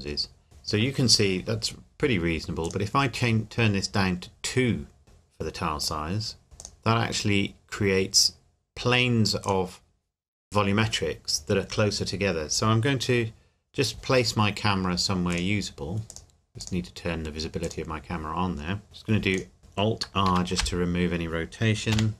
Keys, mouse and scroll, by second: 2.6 click, 5.8 click, 6.6 click, 9.4 click, 15.3 click, 19.3 click, 20.3 alt+r, 21.9 KP_7.